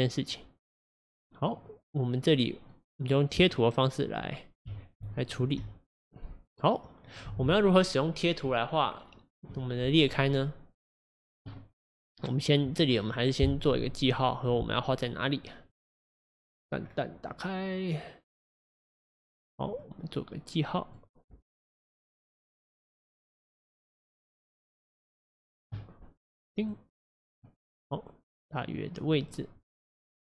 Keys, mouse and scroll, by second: 2.7-4.7 drag, 4.7 f, 5.3 click, 5.6-7.3 f, 15.7-16.8 middle drag, 16.8-17.5 scroll down 4, 17.5-18.8 scroll up 1, 18.8 click, 19.8-21.6 middle drag, 21.6 click, 22.1-23.3 middle drag, 23.3-27.5 drag, 27.5-30.2 middle drag.